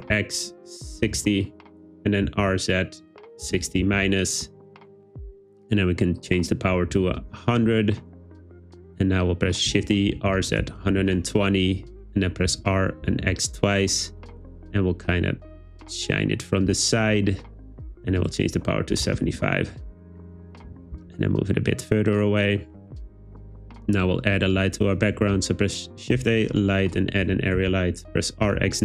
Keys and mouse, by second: 0.0 x, 1.1 6, 1.2 0, 1.7 Return, 2.3 r, 2.4 z, 3.5 6, 3.6 0, 3.9 -, 4.5 Return, 6.3-7.3 drag, 7.2 0, 9.7-10.8 typing, 11.1 Return, 12.5 r, 13.1 x, 13.3 x, 16.9 click, 18.4-19.5 drag, 20.7 g, 20.8 z, 21.0 z, 22.8 click, 25.3 shift+a, 27.3 r, 27.6 x, 28.5 9, 28.6 0.